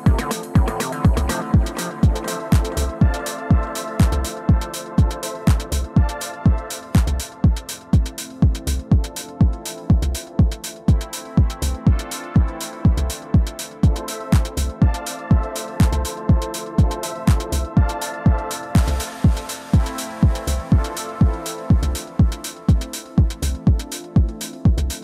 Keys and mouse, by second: 2.6-16.7 drag, 20.6-25.0 drag.